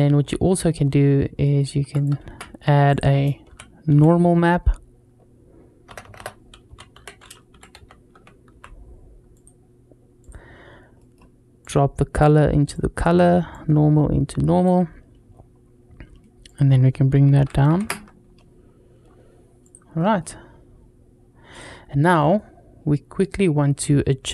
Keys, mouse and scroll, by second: 0.0-0.3 scroll down 1, 0.3 middle click, 1.3 middle click, 1.8 click, 2.0 shift+a, 5.9 BackSpace, 6.0 BackSpace, 10.8 middle click, 11.4 click, 13.3-14.4 drag, 15.1-15.8 scroll up 2, 16.3 click, 19.2 scroll down 1, 19.4 click, 19.8 middle drag, 21.0 scroll down 1, 21.3 drag, 21.6-22.0 scroll down 1, 22.0 middle drag.